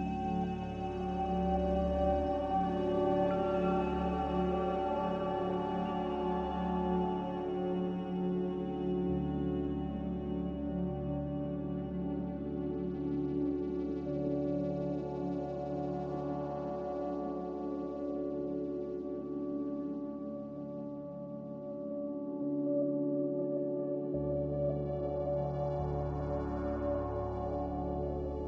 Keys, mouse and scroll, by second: 3.0 click, 4.8 z, 6.6-7.5 typing, 9.4-10.2 typing, 11.6 c, 15.0 F9, 15.0 s, 16.3 s, 17.4-20.7 typing, 23.7-25.2 typing.